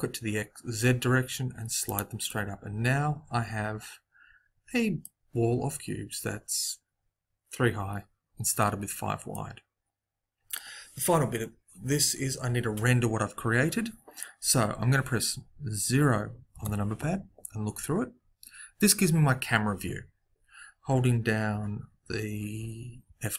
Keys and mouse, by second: 2.2 middle click, 16.5 KP_0.